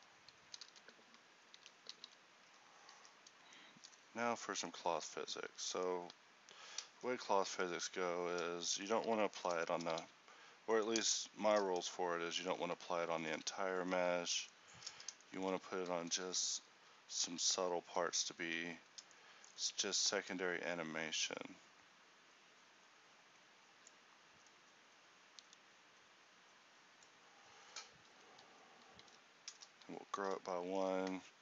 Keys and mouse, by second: 0.0 Escape, 0.6 a, 0.7 a, 1.7 alt+g, 2.1 alt+r, 2.5 a, 5.1 Tab, 7.0 ctrl+n, 18.5 z, 21.3-28.3 drag, 29.5 ctrl+n.